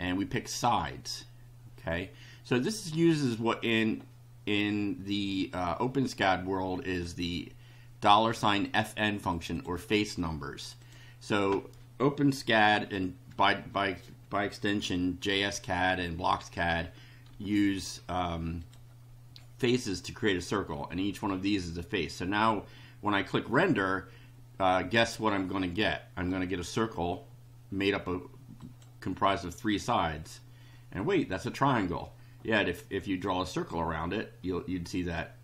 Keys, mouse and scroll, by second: 0.9-2.8 drag, 6.2 click, 8.6 click, 9.3 click, 10.6 click, 17.3 3, 18.6 click, 28.6 click.